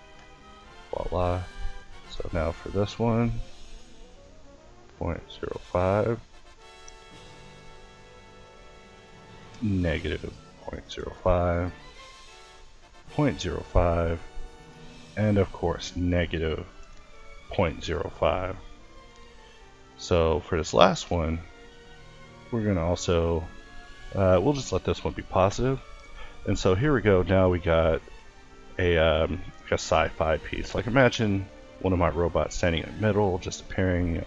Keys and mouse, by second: 0.0-2.3 drag, 2.3 Left, 5.0 click, 7.1 Left, 15.2 Left, 18.4-21.6 drag, 21.6 Left, 24.9 a, 29.6-32.7 middle drag, 33.0 middle click.